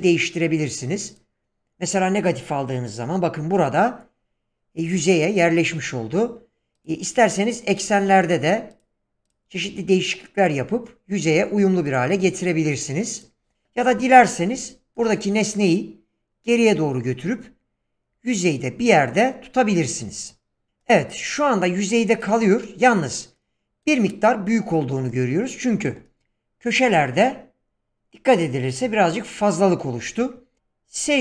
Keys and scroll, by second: 30.0 s.